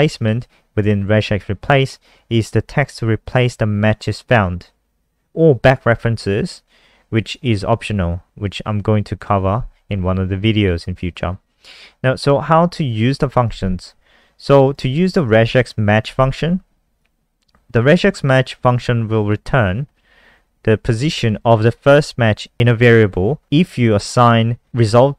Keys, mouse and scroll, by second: 9.5 scroll down 1, 14.4 click, 14.6 click.